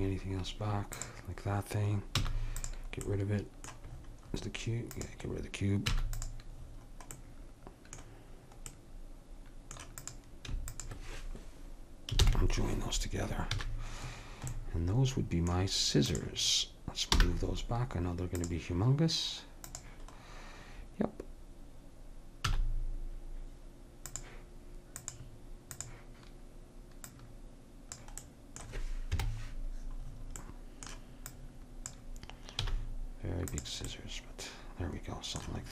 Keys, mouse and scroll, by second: 1.0-2.8 drag, 2.3 x, 4.9-6.3 right drag, 5.9 x, 6.3 click, 10.0-12.3 drag, 12.3 ctrl+j, 13.6 a, 16.1 right click, 16.9-18.0 drag, 17.1 m, 19.7-21.5 drag, 22.5 s, 25.0-26.9 drag, 27.1-28.9 drag, 28.2 middle click, 28.2 right click, 29.1 KP_Decimal, 31.3 click, 32.6 s.